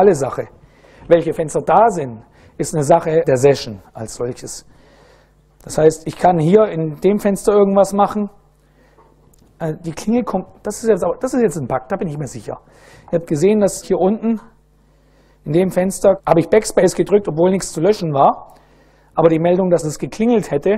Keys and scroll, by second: 4.8 a, 6.0-8.3 typing, 13.8 BackSpace, 14.4 ctrl+a, 15.4 BackSpace, 15.9 BackSpace.